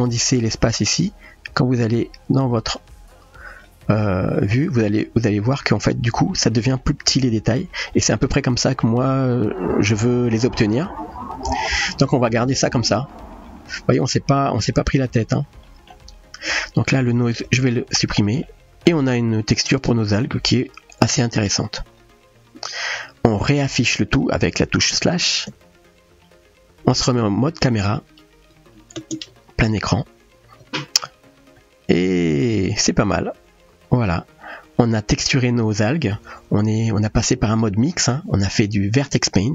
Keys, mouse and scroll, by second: 2.7 click, 4.3-5.2 middle drag, 5.9-6.8 middle drag, 7.9-8.8 middle drag, 10.3-13.5 middle drag, 14.8 middle click, 15.7 middle click, 16.5 click, 18.4-18.9 middle drag, 19.7-20.2 middle drag, 21.9 KP_0, 28.4 KP_0, 29.8 ctrl+space.